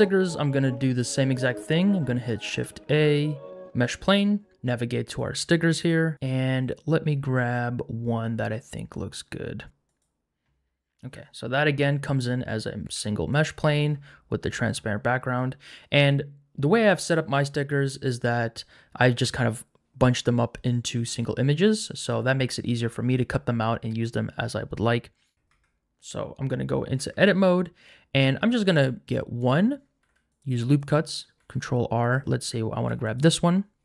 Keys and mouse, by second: 2.6 shift+a, 12.8 g, 12.8 z, 13.3 click, 18.2-20.9 middle drag, 25.3 ctrl+z, 25.5 Tab, 27.1 Tab, 28.4 ctrl+r, 28.7 click, 30.0 ctrl+r, 31.4 ctrl+r, 32.0 click, 32.9 3, 33.0 click.